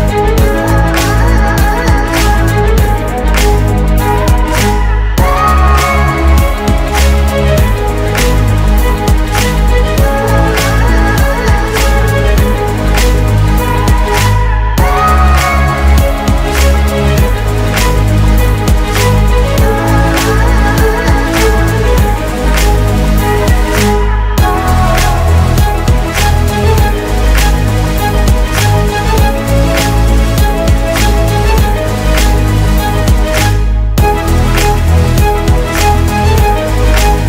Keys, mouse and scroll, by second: 1.6 typing, 5.4-6.7 typing, 6.7 Return, 13.6 typing, 14.2 Return, 16.4-17.1 typing, 17.1 Return, 20.1-20.5 typing, 20.7 Return, 25.0 typing, 28.3-29.1 typing, 29.1 Return, 31.2 shift+Up, 31.9 Down, 36.9 ctrl+shift+c.